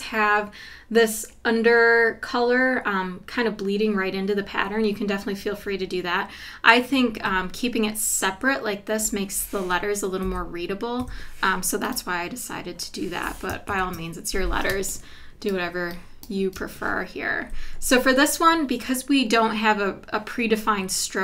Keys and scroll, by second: 10.2 Left, 11.0 Down, 13.7 super+=, 14.7 space.